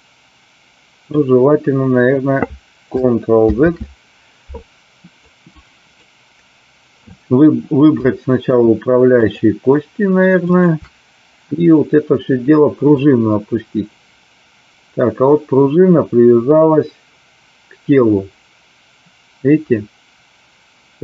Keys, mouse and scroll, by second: 3.6 ctrl+z, 5.2 click, 7.9 shift+middle click, 9.2 shift+click, 10.3 shift+click, 13.1-21.0 drag.